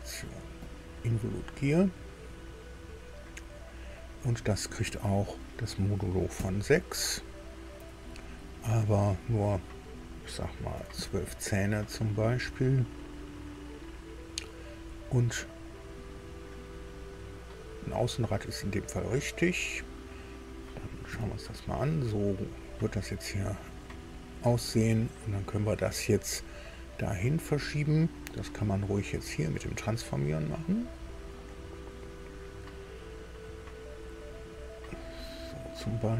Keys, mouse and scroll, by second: 0.6 click, 5.0 click, 6.3 KP_6, 9.3 click, 10.7 KP_1, 10.9 KP_2, 18.9 click, 21.1 KP_2, 27.0 right click, 29.3 click, 30.7-32.8 drag, 34.0-36.1 drag.